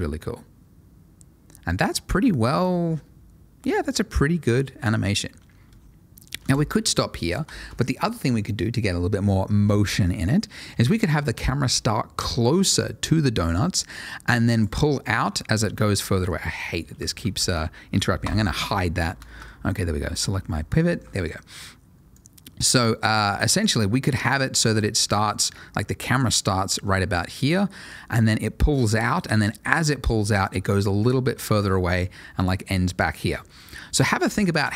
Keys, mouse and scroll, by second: 5.6 space, 7.8 shift+click, 13.5 click, 14.8-15.2 scroll down 1, 15.2 middle click, 15.7-16.0 scroll down 1, 16.0 middle click, 16.4-17.0 scroll down 1, 17.0 shift+middle click, 17.3 shift+click, 18.2 h, 18.6-19.2 scroll up 1, 19.2 shift+middle click, 19.3 scroll up 3, 20.1 click, 20.5 scroll down 1, 20.9 shift+middle click, 21.1 shift+middle click, 21.2-22.1 scroll down 1, 22.1 click, 23.3 scroll down 1, 23.6 shift+middle click, 23.9 shift+scroll up 1, 24.0 middle click, 24.6 ctrl+shift+a, 26.3 click, 33.8 Escape.